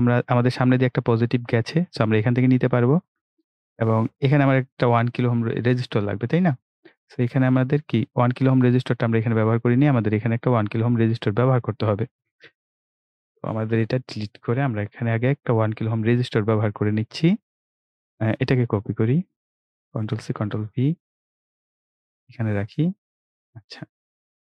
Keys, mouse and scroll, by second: 5.2-6.6 scroll up 1, 9.3 right click, 11.2 click, 13.7 Delete, 16.0-16.7 scroll up 1, 18.6 click, 20.0 ctrl+c, 20.2 ctrl+v, 22.2 click.